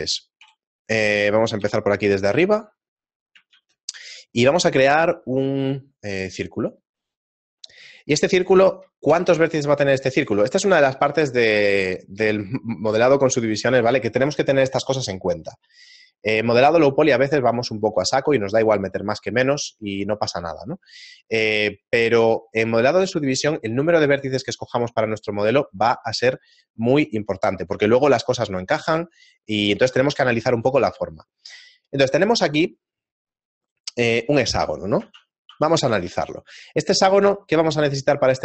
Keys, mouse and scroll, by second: 0.4 KP_1, 1.7 KP_7, 2.7 middle click, 3.5 shift+a, 7.1 middle click, 9.1 F6.